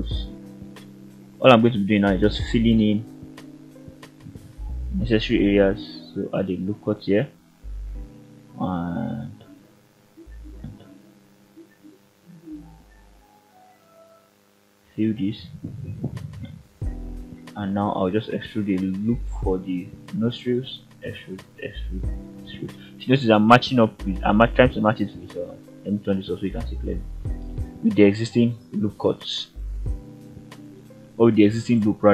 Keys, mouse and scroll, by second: 0.0-0.8 scroll up 1, 0.8 click, 2.1 ctrl+click, 2.6 f, 3.1 middle click, 5.2 ctrl+r, 8.3 click, 9.6 ctrl+click, 11.2 click, 12.5 ctrl+click, 13.5 f, 14.1 scroll down 1, 14.4 middle click, 15.1-15.4 scroll up 1, 16.3 click, 16.9 e, 18.0 click, 19.1 ctrl+right click, 24.4 click, 26.3 ctrl+right click.